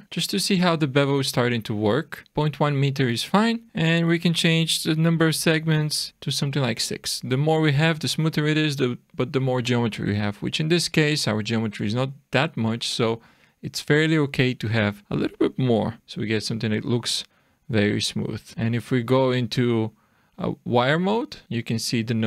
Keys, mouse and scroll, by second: 0.0-0.6 scroll up 5, 0.6 middle click, 3.1 click, 6.5-8.0 scroll down 3, 10.2-10.7 scroll up 3, 11.0 middle click, 11.8-13.2 scroll down 1, 15.0 click, 18.1 click, 18.5 scroll up 4.